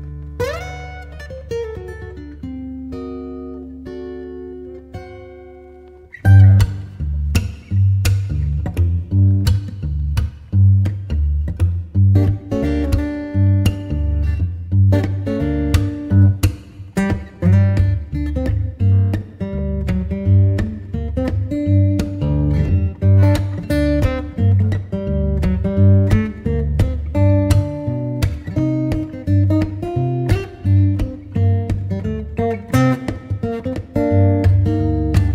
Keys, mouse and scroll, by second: 1.5 middle drag, 1.7 click, 1.8 middle click, 1.9 click, 2.0-3.0 middle drag, 2.1 click, 6.7-7.2 drag, 7.8-11.4 middle drag, 11.4 click, 13.6 click, 14.8-15.4 drag, 15.5 click, 15.6 middle click, 15.6 click, 15.9 click, 16.2 middle click, 16.4 middle click, 16.4 click, 16.6 middle click, 16.8 click, 16.9-17.4 middle drag, 17.0 click, 17.4-18.9 drag, 22.8 shift+space, 25.2 shift+space, 27.0 ctrl+space, 30.6-33.0 drag, 34.3 click.